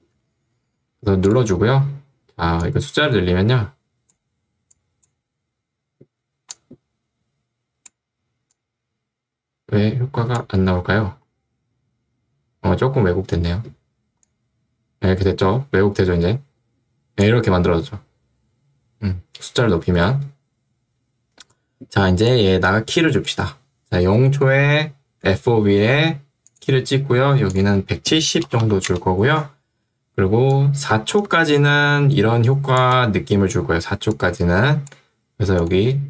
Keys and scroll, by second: 0.2 Escape, 27.9-29.2 typing.